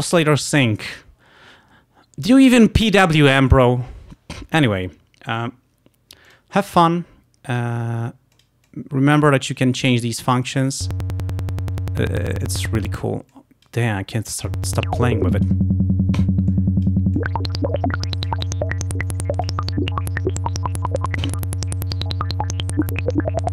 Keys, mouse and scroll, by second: 6.3 click, 7.6 click, 8.4 click, 8.7 click, 9.6-11.1 drag, 13.4 click, 14.2 click, 14.8 click, 16.6 click, 21.7-23.5 drag.